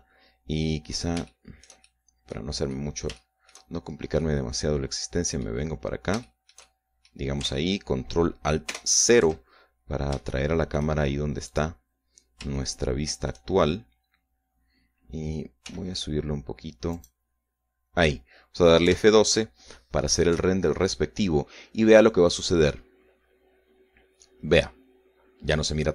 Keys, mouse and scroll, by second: 1.8-2.2 scroll up 2, 2.4 shift+middle click, 3.3 middle click, 3.8-4.8 middle drag, 4.8-5.2 shift+scroll up 3, 5.3-7.2 middle drag, 7.3-8.4 shift+middle drag, 9.8 ctrl+alt+KP_0, 10.8-11.2 ctrl+scroll down 3, 11.4 shift+middle click, 12.6 right click, 13.6 shift+middle click, 15.0-15.6 scroll down 2, 15.6-16.8 scroll up 2, 16.8 g, 18.0 click, 20.0 F12.